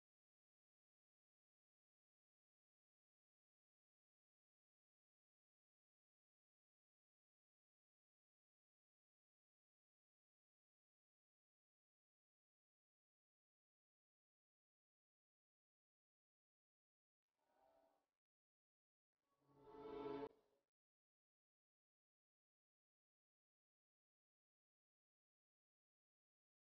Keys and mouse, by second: 5.7-7.3 drag, 5.9 Tab, 6.6 Tab, 11.0-12.8 drag, 19.9 click, 25.6 click.